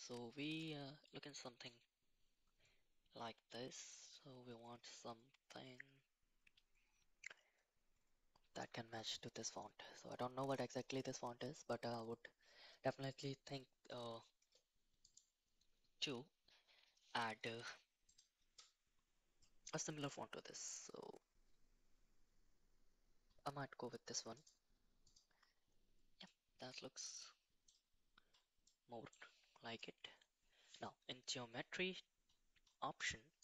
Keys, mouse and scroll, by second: 1.1 middle click, 26.3-27.6 middle drag, 28.6-29.1 middle drag.